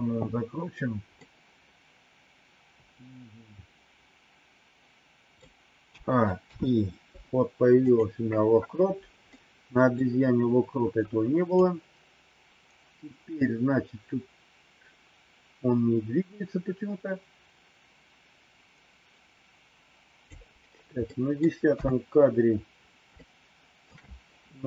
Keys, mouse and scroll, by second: 1.2-5.4 middle drag, 5.9 a, 6.4 i, 9.4 middle click, 11.5-20.3 drag, 21.2 middle click, 21.7 KP_3, 23.0 shift+middle click.